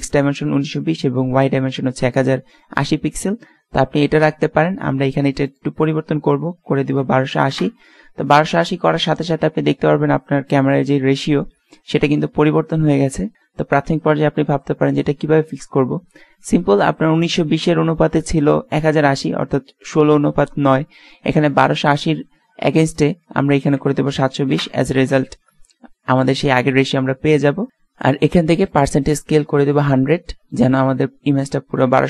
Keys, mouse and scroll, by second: 5.5-7.4 drag, 23.1-24.6 drag, 24.6 KP_Add, 28.8 click.